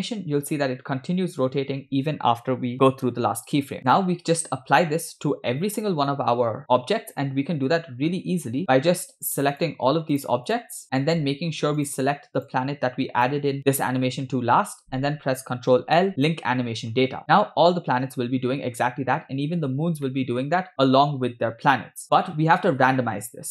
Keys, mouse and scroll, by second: 3.9 space, 8.3 space, 8.6-9.1 scroll up 3, 8.7 shift+middle drag, 9.5 shift+click, 10.3-10.8 shift+click, 10.8 shift+click, 11.8 shift+click, 12.5 shift+click, 13.3 shift+click, 15.7 ctrl+l, 17.4 space, 17.4-17.8 scroll down 3, 18.8 scroll up 3, 20.0-20.6 shift+middle drag, 22.0 scroll down 2.